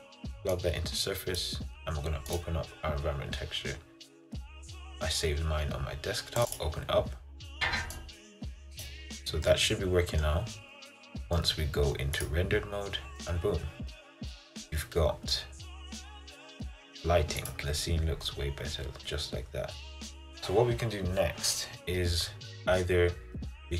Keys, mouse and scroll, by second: 1.5-6.8 drag, 10.8-12.7 middle drag, 12.7 click, 13.3-17.0 middle drag, 17.0 click, 17.5 click, 17.6 scroll down 3, 17.9 scroll up 3, 18.2 scroll down 1, 18.5 scroll up 1, 18.7 scroll down 1, 18.9 scroll up 2, 19.1 scroll down 3, 19.4-21.3 scroll up 2.